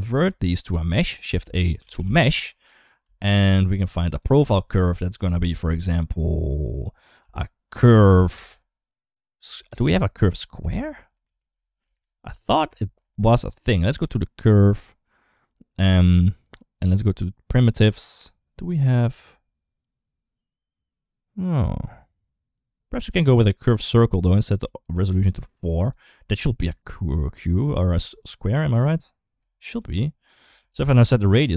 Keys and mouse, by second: 1.1 shift+a, 2.8 g, 4.0-12.5 drag, 12.8 shift+a, 24.6 click, 25.5 click, 27.0-28.0 drag, 29.7 shift+click, 30.5 ctrl+z, 30.9-31.5 shift+drag.